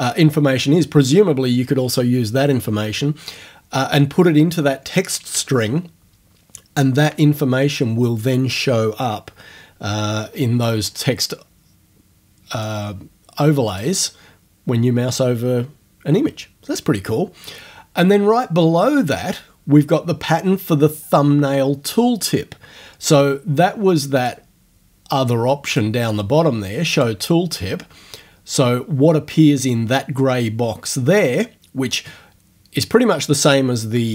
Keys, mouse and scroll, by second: 12.6 click, 13.7 click, 18.4 click, 24.2 click, 25.7 click, 27.0 click.